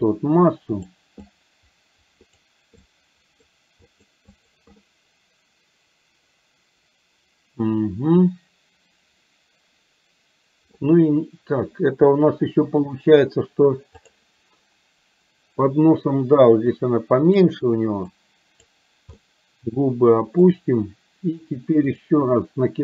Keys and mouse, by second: 0.2 click, 1.3-2.4 drag, 2.8 click, 3.9 click, 4.4 click, 4.8-10.8 middle drag, 14.2 click, 16.8 click, 18.2 click, 19.2-20.5 middle drag, 21.9 click.